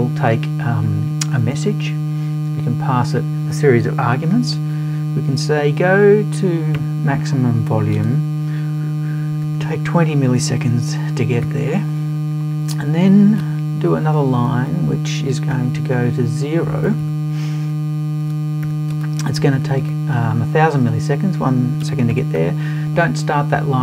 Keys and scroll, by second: 16.9 BackSpace.